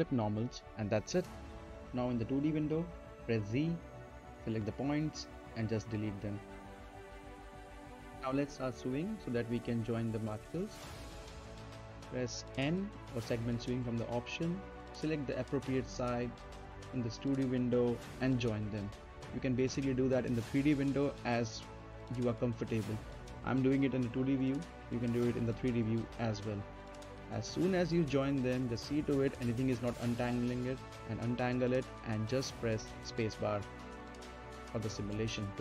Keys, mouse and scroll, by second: 0.8 right click, 1.4 middle click, 1.7 z, 3.5 click, 4.8 shift+click, 7.3 right click, 8.3 click, 8.4-12.4 middle drag, 15.3 scroll up 2, 15.5 middle click, 16.2 click, 18.6 right click, 19.6-19.9 scroll down 1, 19.9 right click, 20.4 middle click, 20.7-21.0 scroll down 1, 21.0-23.0 right drag, 23.0 n, 24.0 click, 26.8 middle click, 27.6 right click, 27.9-28.8 scroll down 1, 28.8 click, 30.8 scroll up 1, 31.3 right click, 31.9 middle click, 33.4 space, 34.4 right click, 35.2-35.6 scroll down 1.